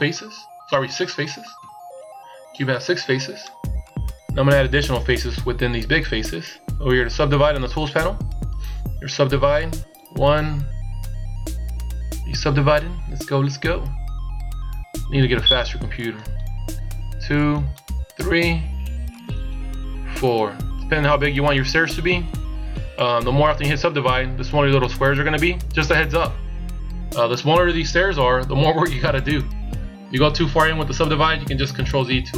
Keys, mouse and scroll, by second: 1.0 KP_1, 3.5 click, 14.0 click, 15.6 click, 17.0 click, 18.8 click.